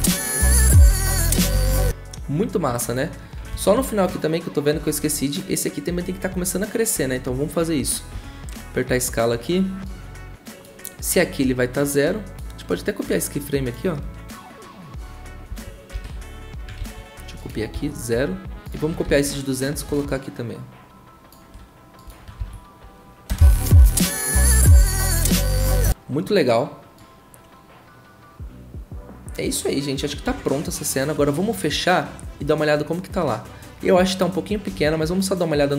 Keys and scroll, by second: 1.5 ctrl+z, 8.1 s, 15.5 ctrl+c, 15.9 ctrl+v, 16.8 ctrl+z, 17.7 ctrl+v, 19.0 ctrl+c, 22.4 ctrl+v, 23.3 0, 25.5 ctrl+a, 34.7 ctrl+w.